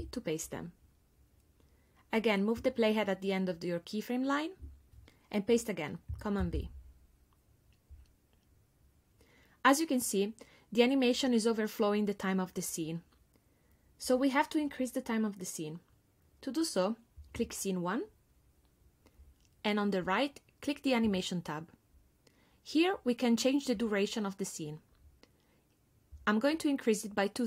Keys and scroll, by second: 6.4 super+v.